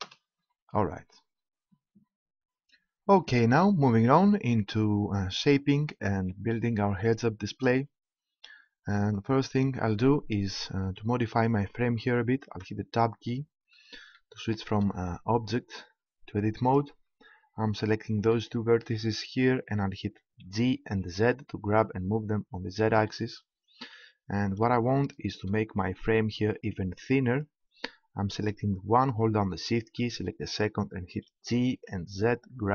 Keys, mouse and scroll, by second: 0.0 Return, 12.6 Tab, 16.0-19.6 middle drag, 20.2 middle click, 20.4 g, 23.6-25.5 drag, 26.5-29.1 right drag, 29.6-31.3 right drag, 31.3 g.